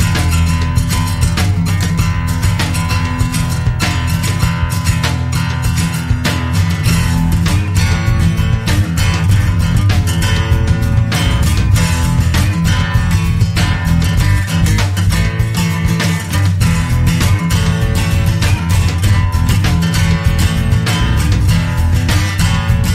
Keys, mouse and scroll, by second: 0.9 5, 1.7 0, 2.9 click, 5.8 click, 7.4-8.0 scroll up 1, 8.9 click, 11.1 click, 15.4 click, 18.8 scroll down 1, 20.1 click, 20.6 click, 21.3-21.6 scroll down 2, 22.3 click.